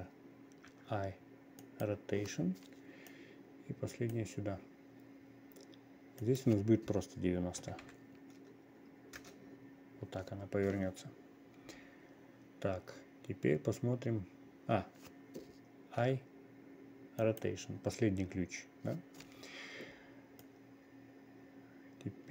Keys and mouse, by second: 3.6-4.7 drag, 6.7 click, 20.9-22.3 drag.